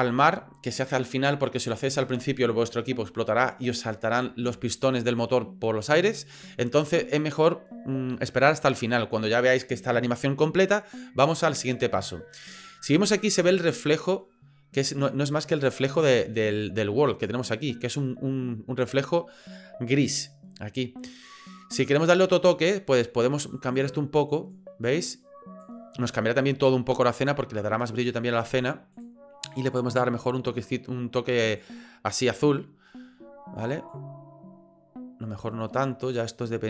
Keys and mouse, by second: 17.1 click, 22.0 click, 28.9 click.